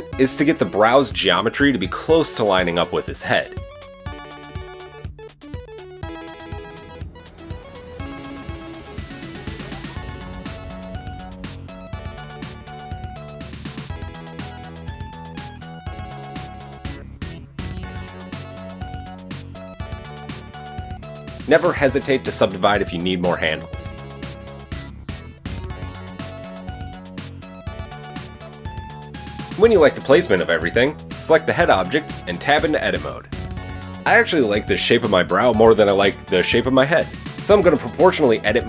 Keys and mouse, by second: 2.2-11.0 drag, 3.4 middle click, 3.4 right click, 6.0 g, 11.0-14.4 middle drag, 14.4 click, 14.5-21.9 shift+middle drag, 17.3 g, 21.9 shift+click, 22.0-27.5 shift+middle drag, 22.5 space, 25.0 KP_1, 25.6 Tab, 28.0 click, 28.2-30.8 middle drag, 30.8 click, 31.0-38.6 shift+middle drag, 31.5 Tab, 32.0 a, 35.0 Tab, 36.5 Tab, 37.6 KP_1, 37.9 a.